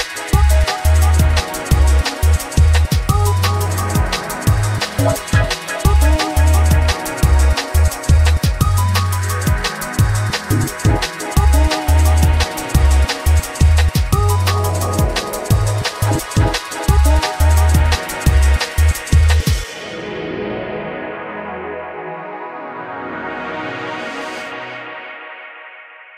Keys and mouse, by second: 2.0 g, 6.3 Tab, 6.6 3, 6.7 click, 8.1 shift+click, 9.0 ctrl+g, 10.4 click, 11.6-13.0 shift+drag, 15.2 click, 16.1 click, 18.8 F3, 22.0 Down, 25.1 click, 25.6-26.1 drag.